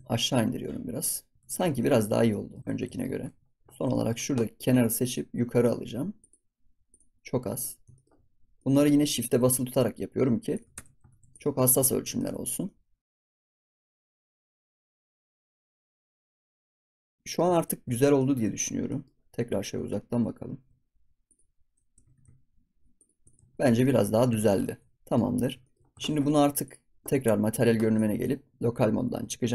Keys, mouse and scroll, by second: 1.3 scroll up 1, 1.4 ctrl+s, 1.5 scroll down 1, 1.7-2.6 middle drag, 2.6 ctrl+s, 2.9 shift+middle click, 3.1 scroll up 3, 3.2 ctrl+s, 3.4 scroll down 3, 3.6 scroll up 2, 3.6 ctrl+s, 3.9-5.0 shift+middle drag, 5.0 click, 6.1 click, 7.1-8.4 scroll down 10, 7.4 middle click, 7.9 shift+middle click, 8.5 middle click, 8.8 scroll up 1, 9.2 g, 10.7 Tab, 10.8 scroll down 4, 11.0 ctrl+s, 11.2 click, 11.5-12.3 middle drag, 12.3 ctrl+s, 12.3 scroll down 1, 12.6 middle click, 13.0 ctrl+s, 13.1 click, 13.9 click, 14.0 g, 14.4 ctrl+s, 14.4 scroll down 2, 14.6 scroll up 1, 14.7 r, 15.1 Tab, 15.2 ctrl+s, 15.3 click, 15.4 ctrl+s, 15.5 middle click, 15.7 ctrl+s, 15.8 middle click, 15.9 ctrl+s, 16.0 scroll down 1, 16.0 shift+middle click, 16.1 ctrl+s, 16.2 middle click, 16.4-16.7 scroll up 3, 16.5 click, 16.7 ctrl+s, 16.8-17.3 middle drag, 17.3 scroll up 1, 17.5 ctrl+s, 17.5 scroll down 3, 17.9-18.5 shift+middle drag, 18.5 scroll down 4, 18.8 middle click, 19.1 scroll up 3, 20.0 ctrl+z, 20.8-21.2 middle drag, 21.2 click, 21.8 g, 23.2 click, 23.4 ctrl+s, 23.6 scroll down 2, 23.8 middle click, 24.1 scroll up 4, 24.3-24.6 shift+middle drag, 24.6 ctrl+s, 24.8 scroll down 1, 24.9 middle drag, 25.2 scroll up 5, 25.6 shift+middle click, 25.9 ctrl+s, 26.6 click, 27.9-29.1 drag, 29.1 KP_Divide.